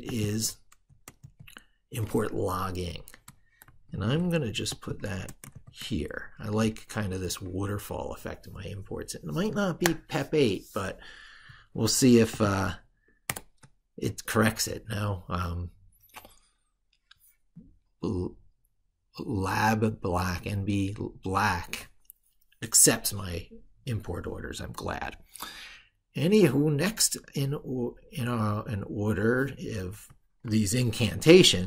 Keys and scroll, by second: 1.1 ctrl+v, 3.4 ctrl+z, 5.4 ctrl+v, 30.2 ctrl+super+Left.